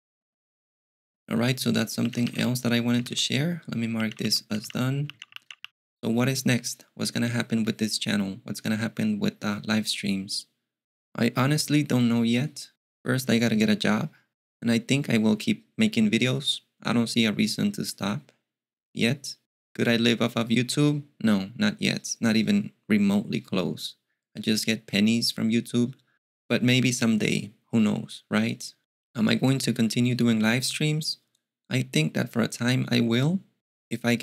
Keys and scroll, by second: 1.8-6.1 typing.